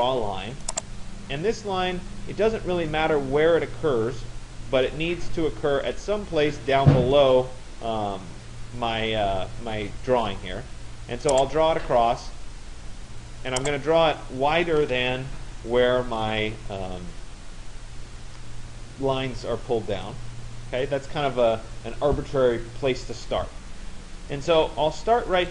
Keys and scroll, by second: 14.4 Return.